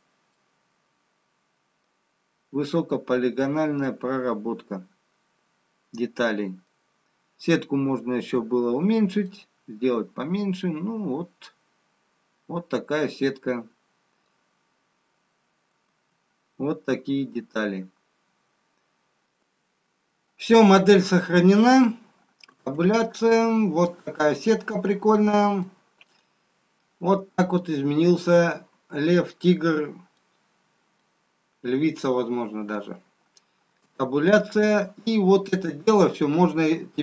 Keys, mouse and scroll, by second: 1.4 middle click, 1.4 scroll down 2, 3.2 middle click, 3.2 scroll down 1, 8.9-9.3 scroll down 3, 11.2 middle click, 11.2 scroll up 1, 17.6 Tab, 17.6-19.2 scroll down 6, 23.0 Tab, 24.8-28.0 scroll down 1, 28.0 middle click, 30.5 scroll down 2, 35.0 Tab.